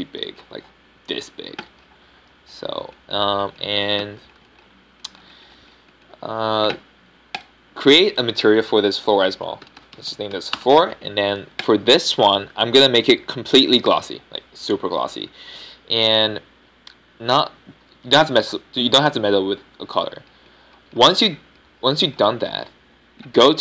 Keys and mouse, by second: 0.0 s, 0.7 s, 9.3-12.0 middle drag, 12.0 o, 13.5-15.4 drag, 21.8-22.8 middle drag.